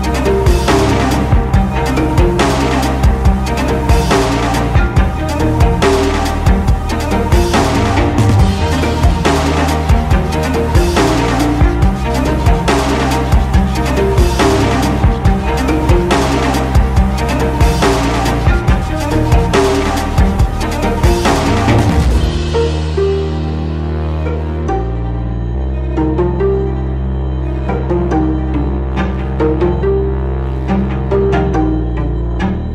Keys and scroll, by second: 7.1 Escape, 12.7 Escape, 14.1 ctrl+x.